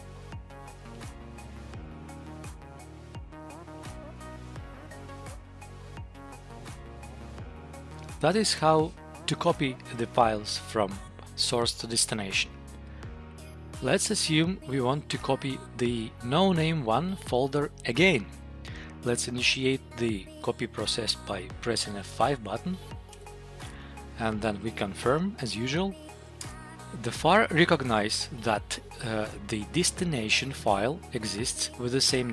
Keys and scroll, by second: 16.3 Up, 23.1 F5, 26.3 Return.